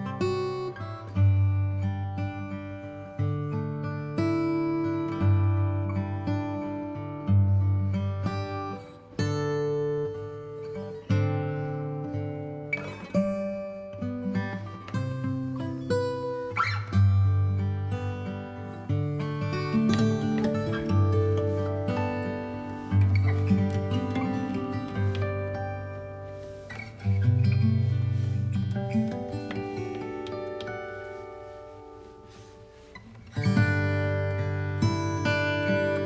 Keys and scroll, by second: 0.5 space, 8.8 ctrl+i, 8.8 ctrl+b, 9.0 ctrl+space, 10.8 space, 12.3 alt+space, 12.8 alt+v, 28.1 ctrl+shift+g, 29.3-30.2 typing.